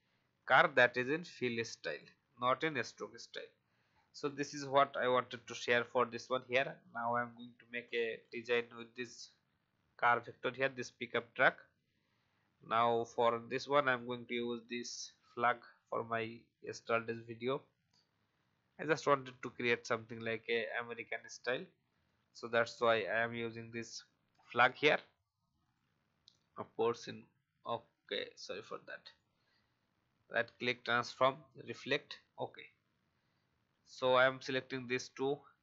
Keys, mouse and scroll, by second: 2.6-3.2 alt+scroll down 1, 3.4-4.0 alt+scroll down 1, 4.0 click, 4.9 alt+scroll up 1, 6.1 click, 6.8-8.2 alt+scroll down 1, 8.2 click, 9.5 alt+scroll up 1, 10.2 click, 11.8 alt+scroll up 1, 12.4 alt+scroll down 1, 13.9-16.3 drag, 16.6 shift+click, 18.4-20.4 drag, 20.9 alt+click, 21.8 right click, 23.8 click, 27.9 ctrl+z, 29.0 right click, 31.0 click, 33.8 shift+click.